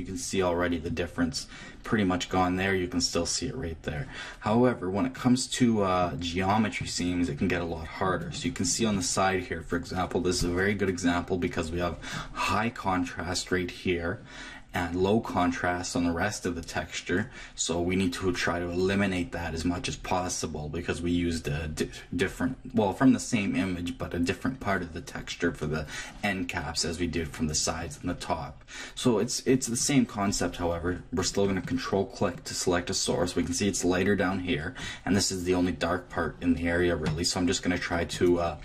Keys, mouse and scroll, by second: 0.9-6.9 middle drag, 7.1-12.4 middle drag, 31.4 click, 38.1-38.6 drag.